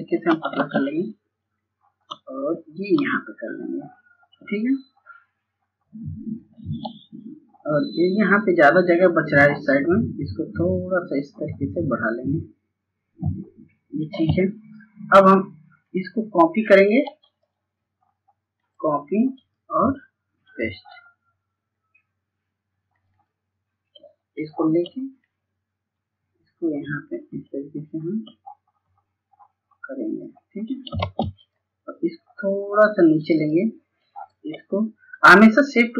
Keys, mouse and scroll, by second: 0.6 ctrl+space, 0.9-1.4 scroll up 1, 2.1-3.1 drag, 3.3-3.7 scroll down 1, 4.6 click, 7.1 scroll down 1, 8.0 scroll up 1, 8.9-20.5 drag, 25.3-28.2 shift+drag, 30.4 shift+click, 31.1 ctrl+space, 31.5 click, 35.2-35.9 shift+drag.